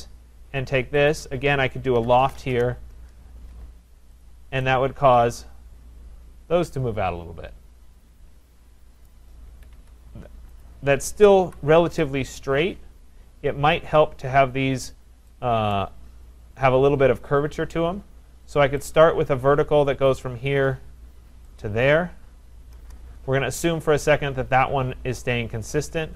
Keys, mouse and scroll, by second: 1.1 shift+click, 1.8-3.2 typing, 4.3 click, 9.1 right click, 9.5 Escape, 9.8 Escape, 10.7 click, 11.5 Delete, 15.8 right click, 18.9 click, 20.2 click, 21.6 click, 22.8 Return.